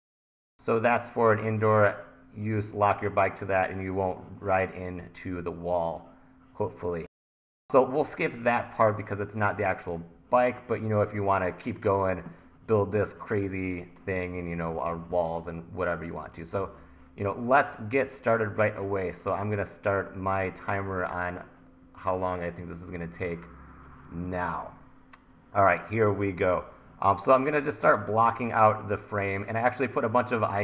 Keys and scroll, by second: 24.1 1.